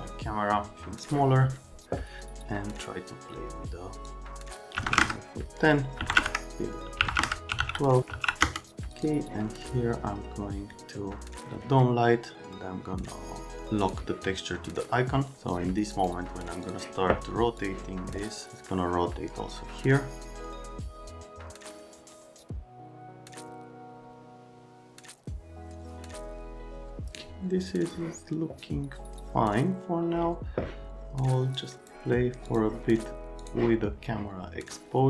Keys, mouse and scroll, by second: 0.7 click, 4.0 Num_Lock, 4.7 KP_1, 4.8 KP_0, 4.9 KP_Enter, 6.0-8.1 typing, 6.2 KP_Enter, 7.1 KP_Enter, 8.4 KP_Enter, 8.9 middle click, 13.8 right click, 15.3 right click, 16.6 right click, 17.6 click, 18.5 click, 23.5 middle click, 31.6 click, 32.5 click, 33.4 click.